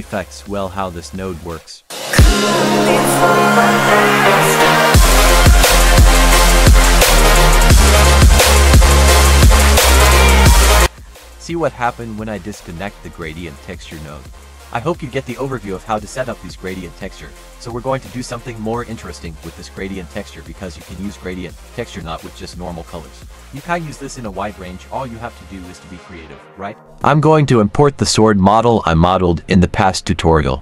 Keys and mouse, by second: 1.4 click, 2.3-5.2 drag, 5.7-9.3 drag, 9.8 middle drag, 16.0 click, 17.7 click, 23.6 click, 24.9 click, 25.2 typing.